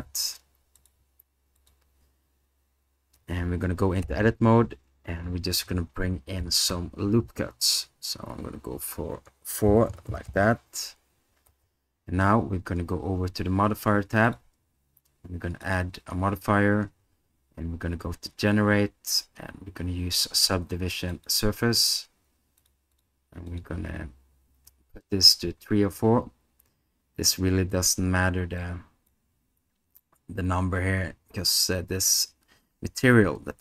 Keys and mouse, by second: 0.0 s, 1.6 click, 4.0 Tab, 9.9 Return, 11.5 Tab, 15.8-21.3 drag, 22.9 click, 23.6 click, 28.6 click.